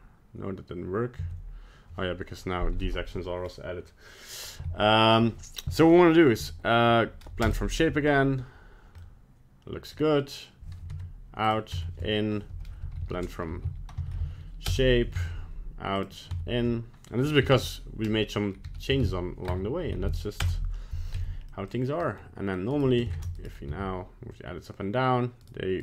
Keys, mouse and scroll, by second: 1.2 Tab, 6.4 F3, 9.0 middle click, 10.9 Tab, 11.4 click, 11.7 Tab, 12.5 F3, 15.2 Tab, 16.0 click, 16.3 Tab, 17.2 F3, 21.2 Tab, 21.5 middle click, 22.0 middle click, 22.7 right click, 23.1 ctrl+Tab, 23.4 right click, 23.7 g.